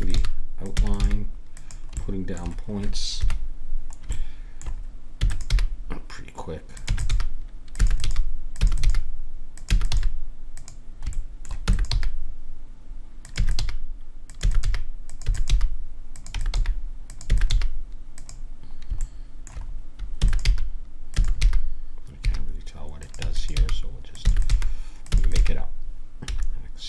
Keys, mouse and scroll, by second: 0.0-1.0 typing, 1.9-3.0 middle drag, 3.1 KP_1, 5.2 e, 5.5 g, 6.9-9.9 typing, 11.1 middle click, 11.6 e, 11.9 g, 13.4-17.5 typing, 19.0 middle click, 20.1 e, 20.4 g, 21.1 e, 23.2-25.3 typing.